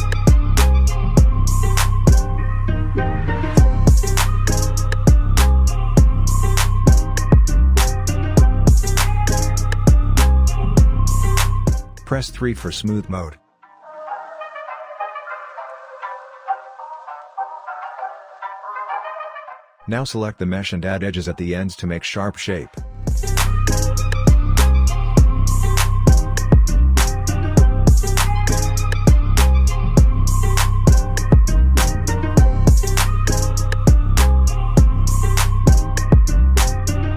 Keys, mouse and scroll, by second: 0.0-7.0 drag, 7.0-8.3 right drag, 8.3 click, 8.9 scroll down 1, 9.4-11.2 alt+drag, 12.7 3, 13.8-15.1 scroll up 1, 15.8-17.4 shift+right drag, 18.8 alt+middle click, 19.6-20.2 scroll up 1, 20.3 alt+click, 21.0-21.3 alt+scroll up 2, 22.3-26.5 drag, 26.5-27.0 scroll down 2, 27.2 alt+middle click, 28.3-28.7 scroll up 2, 28.9 alt+middle click, 29.3 alt+scroll up 1, 30.9-34.0 drag, 34.0-35.4 scroll up 1, 35.4 alt+scroll up 1, 35.5-37.1 alt+middle drag.